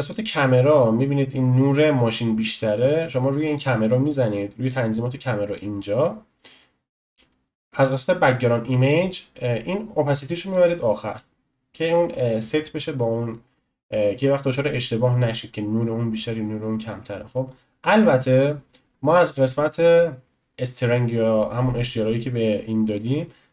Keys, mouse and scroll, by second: 0.0 click, 3.5 click, 4.7 click, 7.8-8.7 drag, 8.7-10.5 scroll down 5, 10.5-21.1 drag, 21.1-22.9 scroll up 2, 22.9-23.5 drag.